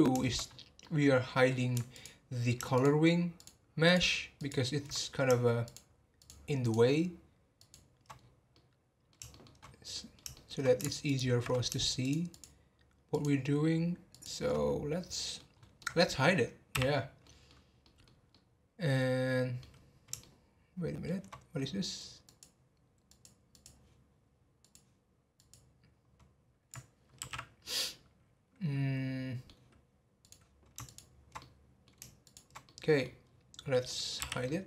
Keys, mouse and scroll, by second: 0.4-0.8 scroll up 1, 0.8-1.9 middle drag, 1.9 alt+click, 2.7 alt+shift+click, 3.3 alt+shift+click, 3.8 alt+shift+click, 4.3 alt+shift+click, 5.6 shift+click, 6.2 shift+click, 6.6 shift+click, 7.5 shift+click, 8.2-8.5 scroll down 2, 8.5-9.6 middle drag, 9.6 scroll up 2, 9.9-11.0 middle drag, 11.0 alt+shift+click, 12.0 shift+click, 12.3 shift+click, 13.1 shift+click, 14.1 shift+click, 14.6-15.0 scroll down 6, 15.1 middle click, 15.5 scroll up 1, 15.8 middle click, 16.7 h, 17.1 scroll up 1, 17.2-19.7 middle drag, 19.7 scroll up 1, 20.2-22.2 shift+middle drag, 22.2 click, 23.1 click, 23.5 click, 24.6 click, 27.2 alt+h, 27.6-30.2 middle drag, 30.2 click, 31.4 middle click, 32.2 shift+click, 32.6 middle click, 33.2-33.9 scroll down 4, 33.9 middle click, 34.2 h, 34.4-34.6 middle drag.